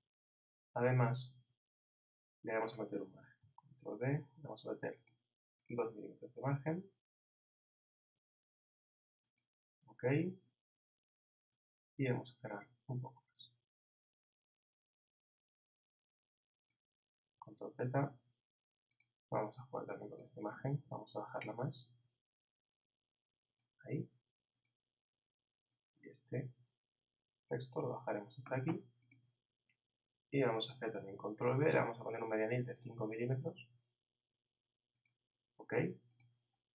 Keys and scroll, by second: 3.4 super+b, 17.5 super+z, 31.0 super+b.